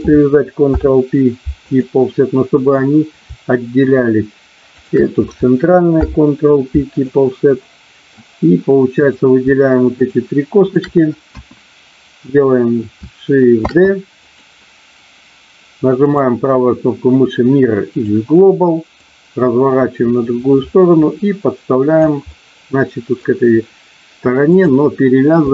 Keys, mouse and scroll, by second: 0.7 ctrl+p, 2.5 click, 4.7 shift+click, 5.9 ctrl+p, 7.5 middle click, 9.0 click, 9.9 shift+click, 10.7 shift+click, 11.3 KP_1, 13.5 shift+d, 14.2 click, 15.9-18.0 right drag, 19.0-22.0 drag, 22.3 middle click, 24.5 click.